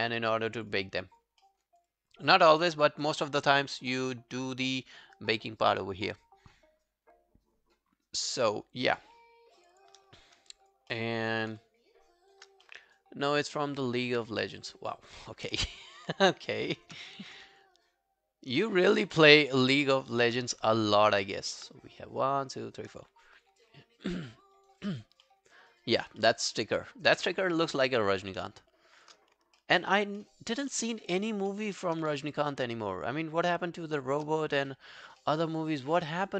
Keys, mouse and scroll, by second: 0.6 double click, 0.9 alt+click, 1.4 alt+middle click, 1.7 alt+right click, 1.9 alt+click, 8.9 shift+click, 9.6 shift+click, 10.2 alt+click, 10.9 alt+middle click, 11.2 alt+right click, 12.2 shift+click, 12.7 alt+middle click, 12.9 alt+right click, 14.1 q, 15.0 alt+click, 15.4 alt+right click, 15.6 alt+middle click, 15.9 alt+right click, 16.6 shift+click, 17.2 ctrl+z, 17.6 shift+click, 18.6 shift+click, 19.2 shift+click, 20.5 shift+click, 20.6 alt+middle click, 20.9 alt+right click, 21.3 alt+middle click, 23.3 alt+scroll down 1, 23.5 alt+click, 24.3 alt+middle click, 24.6 alt+right click, 24.8 alt+click, 25.3 alt+middle click, 25.6 alt+right click, 25.8 alt+click, 26.2 alt+middle click, 26.5 alt+right click, 26.7 alt+click, 27.3 alt+middle click, 27.6 alt+click, 28.0 alt+right click, 29.0 shift+click, 29.3 scroll down 2, 29.6 alt+middle click, 29.9 alt+right click, 30.2 alt+middle click, 30.5 alt+right click, 30.7 alt+middle click, 31.0 alt+right click, 31.2 alt+click, 31.5 alt+middle click, 31.7 alt+right click, 32.4 shift+click, 33.0 shift+click, 34.5 alt+scroll down 1, 34.7 alt+click, 35.2 alt+middle click, 35.5 alt+right click, 35.7 alt+click, 36.0 alt+middle click, 36.3 alt+right click.